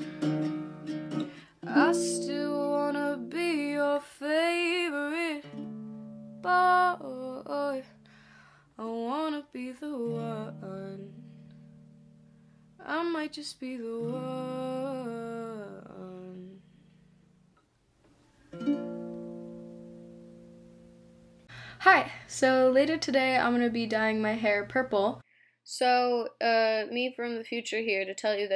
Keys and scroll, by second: 4.0-4.8 typing, 8.6 Delete, 18.9-20.1 typing, 20.5 Return, 21.7-22.7 typing.